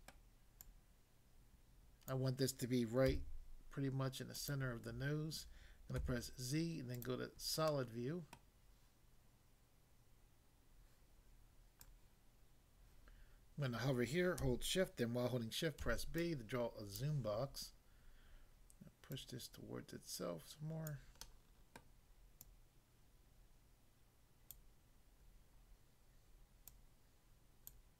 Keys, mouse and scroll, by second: 0.2 middle click, 0.6 click, 2.1 click, 3.1 s, 4.4 click, 6.0 z, 6.9 click, 7.7 middle click, 8.3 middle click, 11.8 click, 12.0 click, 15.8 b, 16.3 click, 17.0 click, 19.1 click, 20.9 click, 21.3 middle click, 21.8 middle click, 22.5 click, 24.5 click, 26.6 click, 27.7 click.